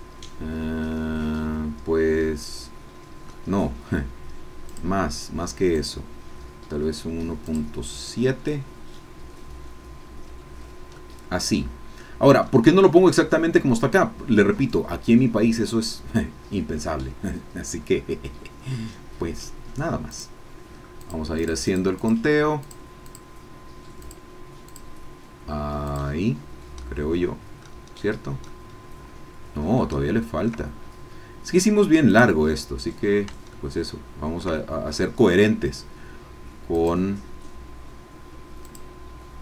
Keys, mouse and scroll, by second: 4.7 click, 7.4 click, 11.0-12.5 middle drag, 20.1 click, 21.0-22.3 drag, 22.7-23.7 drag, 26.1 click, 27.3 middle click, 28.0 scroll down 1, 28.5-30.6 middle drag, 32.1 click, 33.5 shift+middle click, 34.6 shift+middle click, 36.7-38.3 drag, 38.6-39.4 drag.